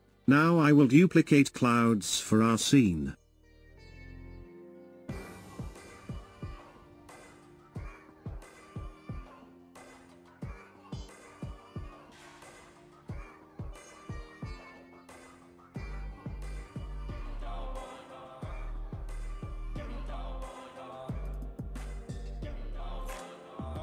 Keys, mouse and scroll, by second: 1.5-4.5 drag, 4.6 shift+d, 7.9 ctrl+z, 10.3 a, 13.7 shift+d, 20.2 r.